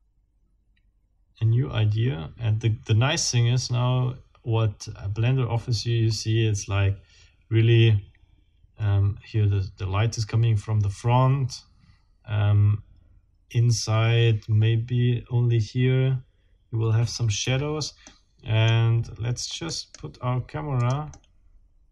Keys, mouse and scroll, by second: 17.4 Escape, 18.1 click, 19.7 right click, 20.8 click, 21.5 click.